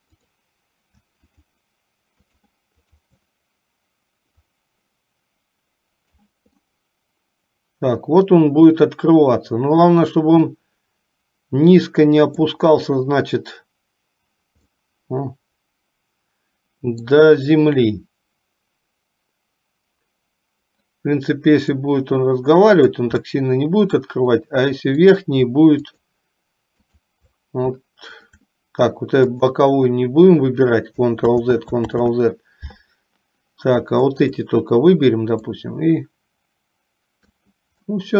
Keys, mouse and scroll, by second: 0.4 click, 1.5 shift+click, 2.5 shift+click, 3.0 shift+click, 4.5-6.4 drag, 6.8-12.6 middle drag, 14.9-17.3 middle drag, 21.7 click, 22.1-23.2 drag, 23.5 middle click, 25.1 click, 26.1 shift+click, 27.0 shift+click, 28.3 shift+click, 29.5 click, 31.4 ctrl+z, 32.2 ctrl+z, 34.0 shift+click, 35.8-37.5 drag, 38.0-38.1 middle drag.